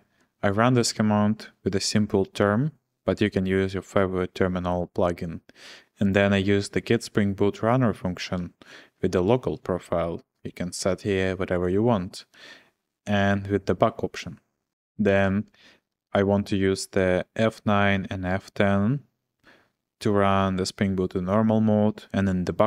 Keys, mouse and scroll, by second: 0.0-0.5 typing, 8.4-9.4 typing, 12.3-13.1 l, 14.7 Return, 15.1 shift+v.